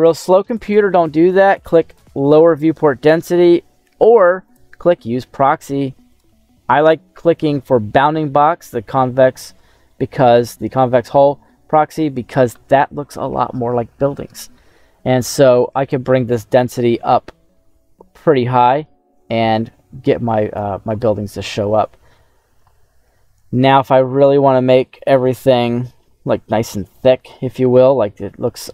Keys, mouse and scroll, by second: 1.8 click, 4.4 click, 6.0 click, 9.8 middle click, 11.4 middle click, 15.8-20.5 drag, 21.6-21.9 scroll down 1, 23.4 scroll down 2, 23.7 middle click, 24.8 middle click, 25.6 middle click, 27.2 middle click.